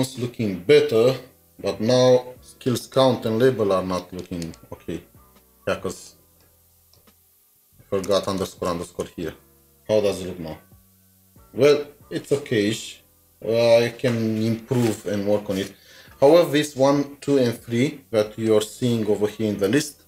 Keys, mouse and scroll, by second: 6.4 typing, 6.4 double click, 7.1 ctrl+d, 8.5 ctrl+s, 8.9 alt+Tab, 8.9 ctrl+s.